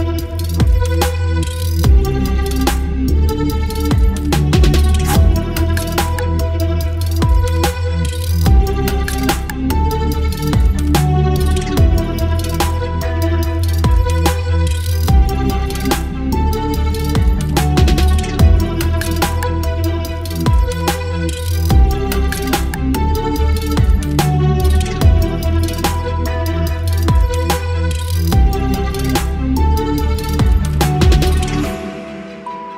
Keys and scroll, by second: 2.5 Return.